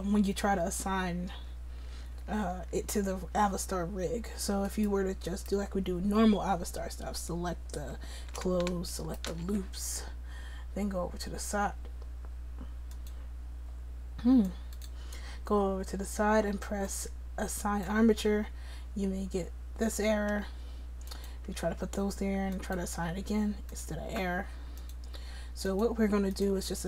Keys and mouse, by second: 21.1 click, 21.7-26.8 right drag.